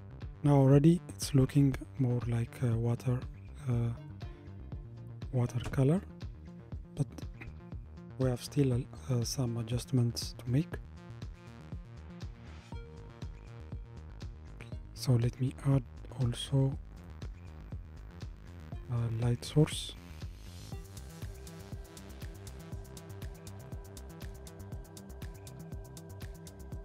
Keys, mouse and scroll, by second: 2.2 scroll up 1, 13.7-17.0 middle drag, 17.0 click, 19.3 shift+a, 21.9-23.1 middle drag, 23.1-23.7 scroll down 1, 23.7-25.7 middle drag, 25.7 g.